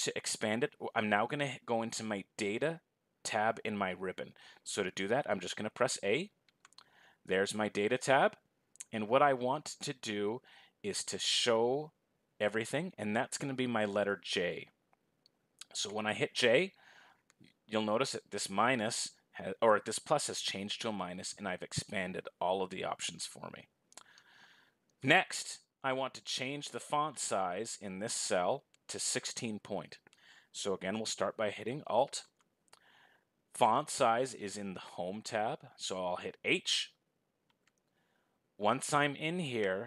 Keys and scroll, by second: 32.3 alt+s.